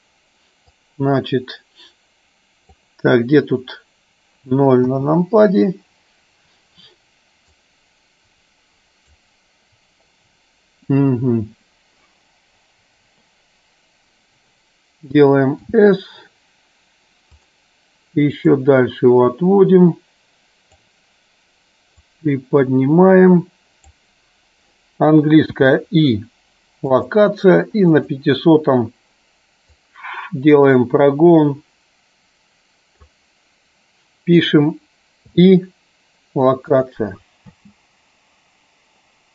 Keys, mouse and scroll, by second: 0.8-2.8 drag, 4.9 KP_0, 7.6-9.2 drag, 18.4-20.8 drag, 22.0-24.1 drag, 28.2 click, 29.7-33.2 drag, 37.7 space.